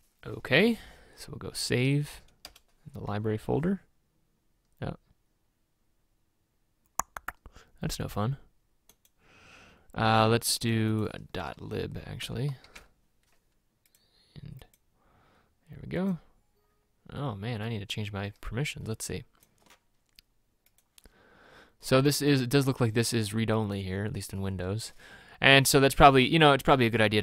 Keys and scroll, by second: 2.5 Return, 12.2-12.8 typing.